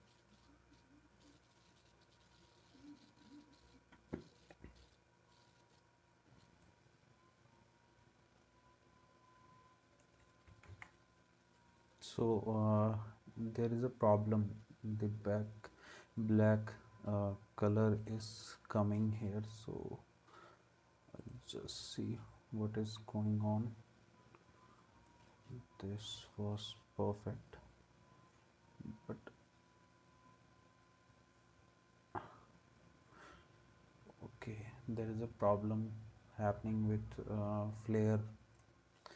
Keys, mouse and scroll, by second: 10.7 ctrl+s.